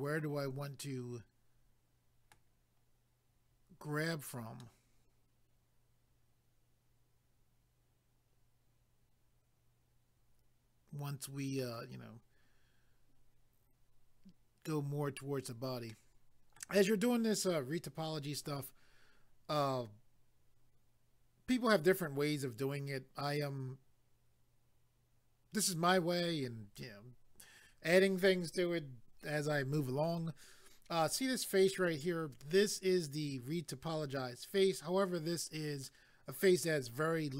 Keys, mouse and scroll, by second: 4.6 middle click, 15.9 middle click.